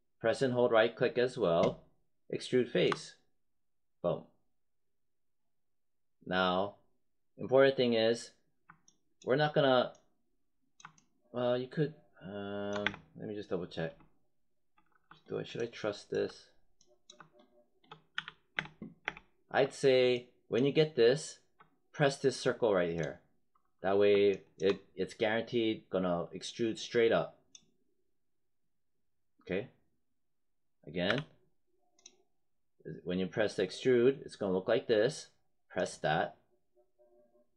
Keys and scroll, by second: 12.7 space, 18.0 z, 18.5 space, 31.0 z.